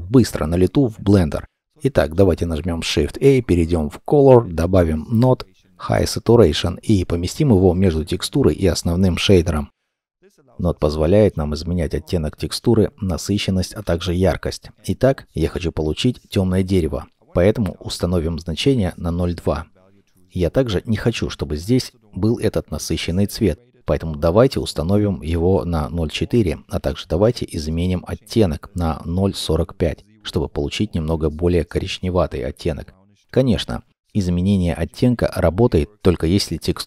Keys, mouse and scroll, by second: 2.2 shift+a, 9.9-10.6 scroll up 1, 14.2 1, 14.6 Return, 17.4-18.9 typing, 19.2 Return, 24.4 0, 24.7 ., 25.6 Return, 27.9 0, 28.2 ., 28.5 4, 29.1 Return.